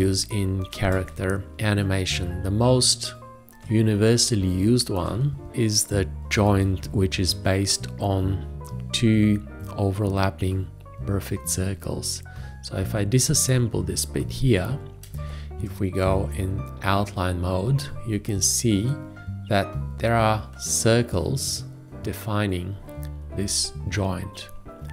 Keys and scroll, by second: 6.7 ctrl+a, 15.3 ctrl+space.